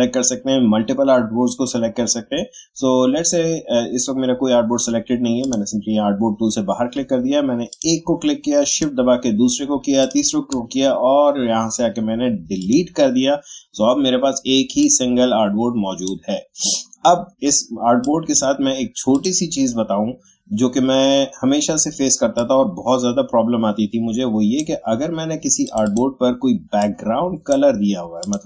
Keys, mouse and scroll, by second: 5.4-19.1 drag, 22.3-28.2 drag.